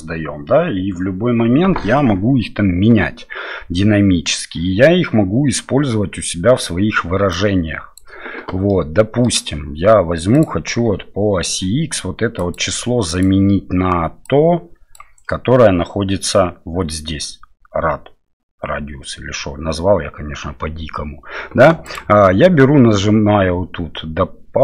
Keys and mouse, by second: 7.3 click, 8.7 middle click, 10.3 click, 12.4-22.0 drag.